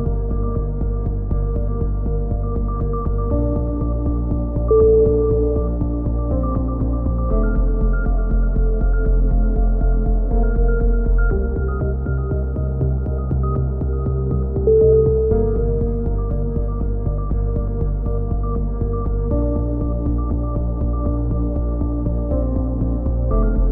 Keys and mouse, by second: 0.6 right click, 1.5 middle click, 2.0-3.2 right drag, 3.2 shift+s, 6.7-8.6 right drag, 9.8 a, 10.0 click, 12.3 middle click, 13.1-14.4 right drag, 15.1 g, 17.8 a, 18.0 middle click, 18.4-19.5 drag, 19.5 middle click, 19.6 g, 22.7 a, 22.8-23.7 middle drag.